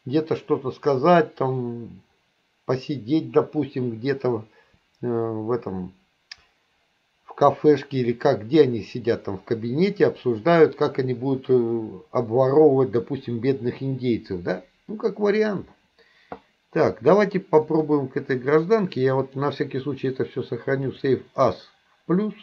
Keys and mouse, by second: 17.7 click, 19.2-21.2 drag.